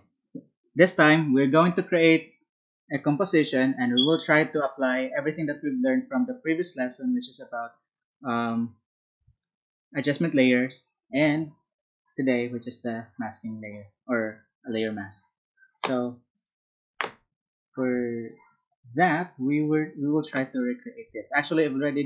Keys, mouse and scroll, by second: 14.5 Escape.